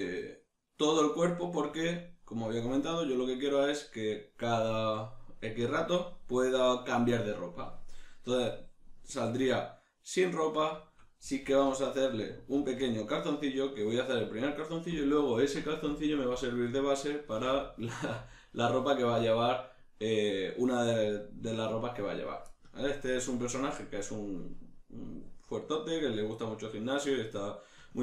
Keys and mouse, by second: 9.1 middle click, 11.5 alt+q, 13.7 shift+middle click, 22.8 ctrl+middle click.